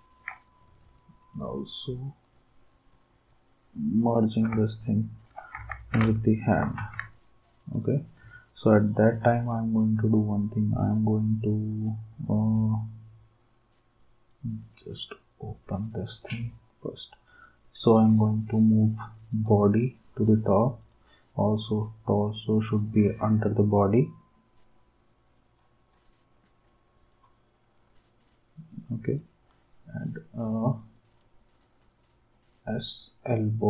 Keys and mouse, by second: 0.5 d, 5.6 ctrl+s, 6.8 ctrl+s, 7.7 d.